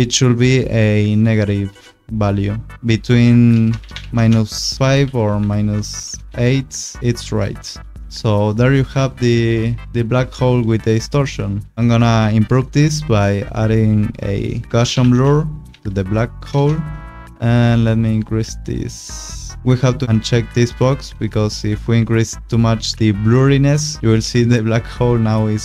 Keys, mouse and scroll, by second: 3.3 5, 3.5 BackSpace, 3.7 -, 3.9 5, 4.1 Return, 5.0 -, 5.4 7, 5.7 BackSpace, 6.1 Return, 7.0 click, 8.0 click, 14.6-15.5 typing, 15.7 Down, 16.5 Return, 17.8 click, 19.6 click, 21.5 shift+click, 22.9 shift+click, 23.9 click, 24.1 scroll.